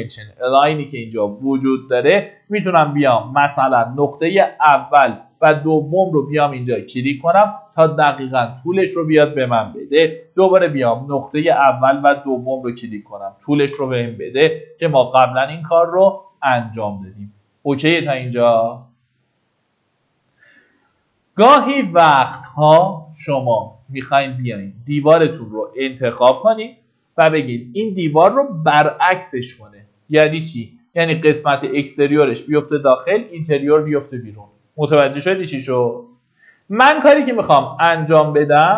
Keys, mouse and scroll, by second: 3.3 middle click, 3.9 scroll up 1, 4.0-4.5 scroll down 1, 4.5 middle click, 5.9 click, 10.2 Escape, 11.2 click, 14.0 Escape, 14.4-15.3 scroll down 1, 15.3-17.5 middle drag, 20.8-22.0 scroll up 1, 22.0 Escape, 22.8 middle click, 24.4-24.8 scroll up 1, 26.0 click.